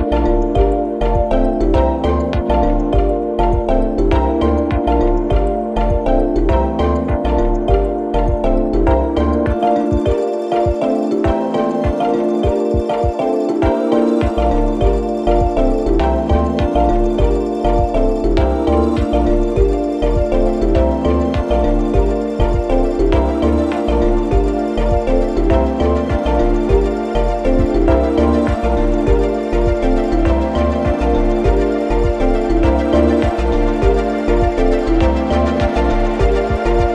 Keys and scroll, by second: 6.1 4, 15.0 F1, 15.2 F2, 15.5 3, 16.3 ], 21.0 4, 21.8 1, 24.2 4, 29.9 3, 30.6 ], 32.7 4.